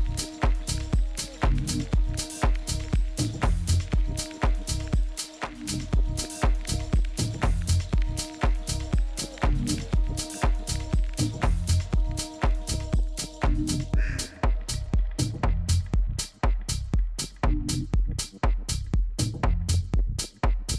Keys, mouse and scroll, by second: 1.8-5.1 middle drag, 5.1 a, 5.5 a, 7.1-9.0 middle drag, 15.3 b.